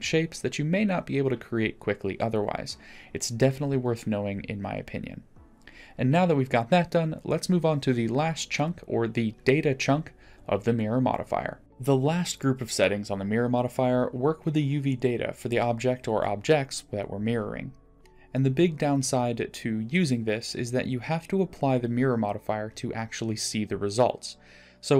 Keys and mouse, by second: 1.0-2.5 drag, 3.2-6.1 drag, 6.1-6.5 middle drag, 9.6 click, 18.0 click, 24.5 middle click.